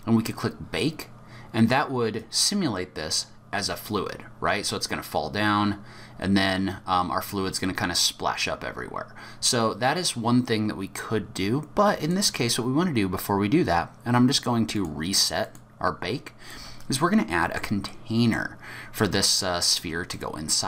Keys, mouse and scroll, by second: 2.2 click, 12.0 click, 14.7 click, 16.5 middle click, 17.9 middle click, 18.8-20.1 scroll up 2, 20.1 middle click, 20.1-20.6 scroll up 1.